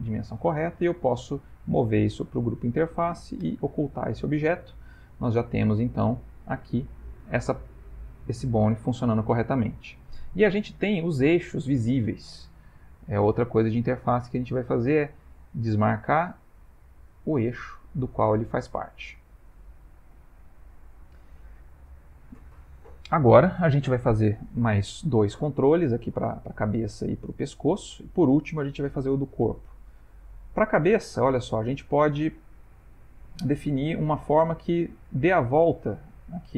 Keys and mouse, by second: 1.2 m, 3.4 h, 3.9 middle click, 4.5 ctrl+middle click, 5.0 shift+middle click, 5.6 ctrl+middle click, 6.6 click, 8.9 middle click, 13.3 click, 16.2 click, 19.8 shift+middle click, 20.5 ctrl+middle click, 21.4 middle click, 26.7 middle click, 29.4 shift+middle click, 30.6 click, 31.9 middle click, 32.9 middle click, 33.0 middle click, 33.2 middle click, 33.5 middle click, 34.9 middle click.